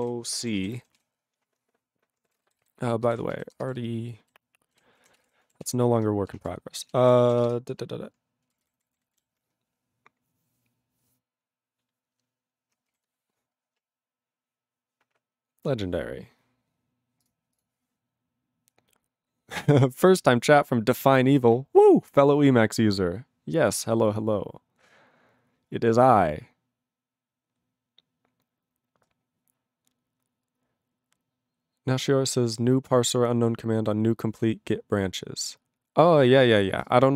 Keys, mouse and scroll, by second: 0.0 ctrl+g, 0.3 ctrl+space, 0.4 ctrl+a, 0.6 ctrl+g, 1.0 ctrl+s, 2.4 ctrl+e, 2.6 alt+b, 3.0 alt+b, 3.5 ctrl+space, 3.6 ctrl+e, 3.8 ctrl+b, 4.3 ctrl+b, 4.3 ctrl+b, 4.7 ctrl+w, 5.0 ctrl+a, 5.1 ctrl+space, 5.2 ctrl+e, 5.2 ctrl+g, 5.8 ctrl+s, 7.5 Return, 8.5 ctrl+p, 8.5 ctrl+space, 8.7 ctrl+n, 8.8 ctrl+n, 9.0 ctrl+n, 9.1 ctrl+n, 13.0 ctrl+g, 17.3 click, 17.6 click.